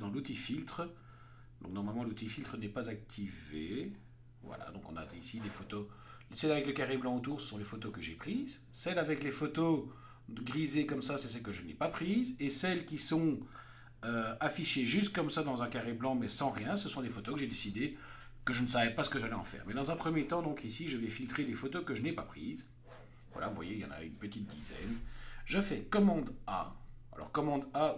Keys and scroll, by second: 26.7 super+a.